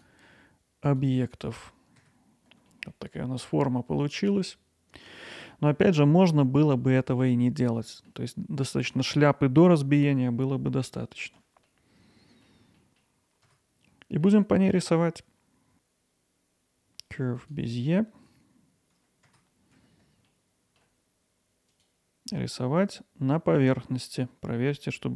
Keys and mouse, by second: 2.0 Tab, 2.8-5.4 alt+middle drag, 7.8 middle click, 10.4 middle click, 11.7 alt+middle click, 12.8 middle click, 13.5 Tab, 14.2 alt+middle click, 15.7 shift+a, 19.3 Tab, 21.8 click.